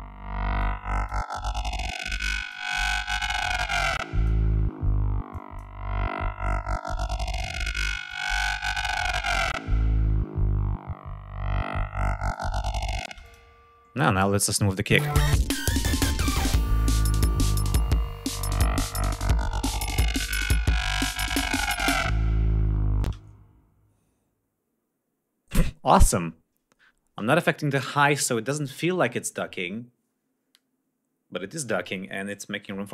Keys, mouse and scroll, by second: 0.6 click, 2.2 click, 3.4 click, 4.0 click, 5.4 click, 7.0 click, 8.1 click, 12.4 click, 13.3 space, 13.3 click, 14.4 click, 15.0 space, 15.4 ctrl+scroll up 2, 20.2 ctrl+scroll down 2, 20.7 ctrl+scroll up 2, 22.3 ctrl+scroll down 2, 23.2 ctrl+space, 23.6 ctrl+scroll up 3.